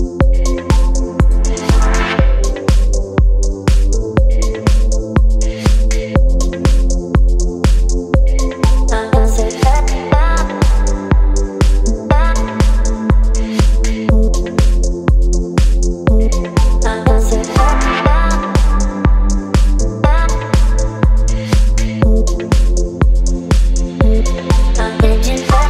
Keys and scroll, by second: 1.4 Return, 1.5 Left, 1.6 Left, 1.7 Left, 5.2 ctrl+t, 7.7 Return, 8.9 space, 11.1 ctrl+e, 16.9 v, 17.1 space, 17.6 ctrl+t, 21.6 Return, 22.7 ctrl+t.